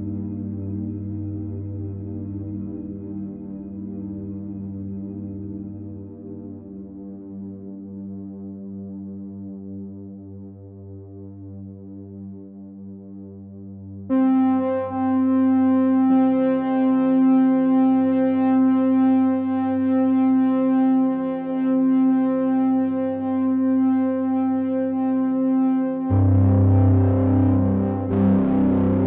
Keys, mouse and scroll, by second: 2.0 ctrl+right click, 8.7 click, 11.1 click, 14.3 click, 19.2 click.